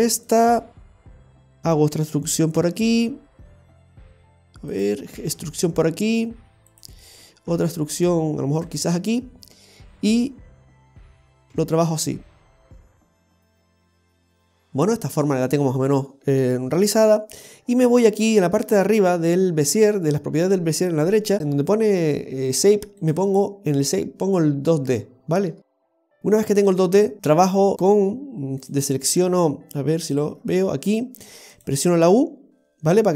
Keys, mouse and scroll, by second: 0.3 click, 1.4 right click, 2.6 g, 4.0 g, 5.1 e, 7.0 e, 10.7 right click, 11.4 g, 17.6-19.7 scroll up 11, 19.7-21.1 scroll up 1, 23.0 click, 26.6-27.7 scroll down 15, 27.7-28.6 scroll down 1, 28.6 click, 29.0 click, 29.4-30.0 scroll down 1, 30.0 click, 30.3 scroll down 1, 31.5 click, 31.5-32.0 scroll down 1.